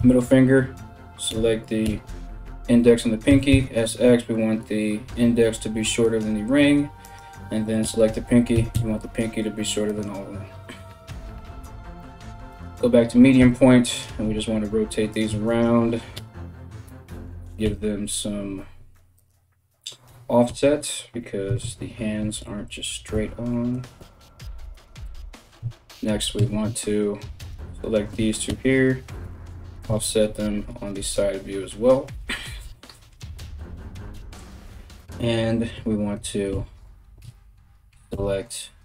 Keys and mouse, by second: 0.9 l, 1.5 l, 2.9 s, 6.6 right click, 6.8-15.1 middle drag, 7.4 l, 8.2 s, 13.0 r, 13.9 g, 15.1 shift+right click, 15.3-38.8 middle drag, 15.8 l, 16.5 r, 17.2 g, 20.1-23.6 typing, 25.2 a, 26.0 KP_3, 27.0 right click, 27.7 l, 28.1 l, 28.8 g, 32.2 a, 33.7 KP_1, 36.1-38.8 typing.